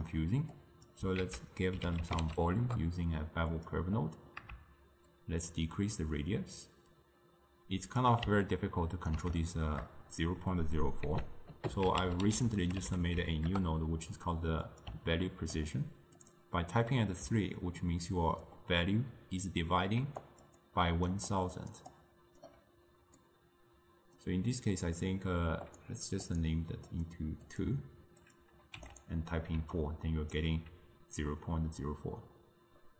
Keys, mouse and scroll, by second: 0.6 click, 1.3 ctrl+a, 4.1 middle click, 5.1-8.2 shift+drag, 8.5-11.1 ctrl+middle drag, 11.1 ctrl+a, 15.2-16.3 ctrl+middle drag, 16.3-17.3 drag, 17.3-18.6 d, 20.1-22.6 typing, 20.3 click, 20.7 click, 21.4 click, 22.0 click, 23.3-27.1 drag, 27.5-29.1 drag, 29.6 d, 29.8 right click, 30.5 d.